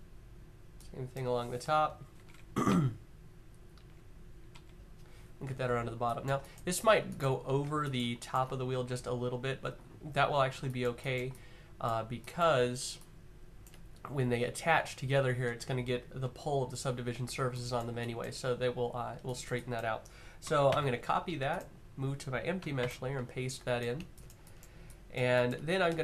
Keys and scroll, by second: 2.3 Up, 2.8 Up, 3.4 Up, 20.4 c, 22.5 v, 25.6 typing.